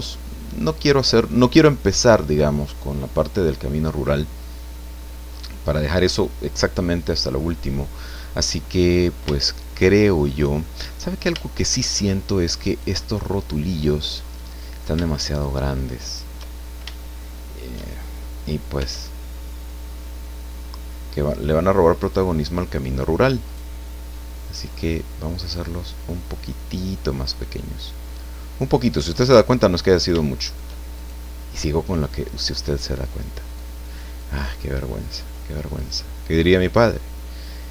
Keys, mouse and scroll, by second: 0.1-5.6 drag, 5.4 scroll down 2, 5.8-6.3 scroll up 2, 6.8-7.2 scroll down 2, 7.5-8.9 middle drag, 9.3-10.8 shift+middle drag, 10.9-11.2 scroll up 2, 11.4 shift+middle click, 12.1 shift+middle click, 12.7 right click, 13.3-14.4 middle drag, 15.3 shift+right click, 16.0 shift+right click, 16.6 shift+scroll down 1, 16.9 shift+middle click, 18.7 s, 22.0 click, 23.5 right click, 24.1 middle click, 25.5-27.5 drag, 28.9 right click, 29.4 middle click, 30.9 shift+right click, 32.0 click, 33.5 click, 34.6-35.9 drag, 36.8-37.7 drag.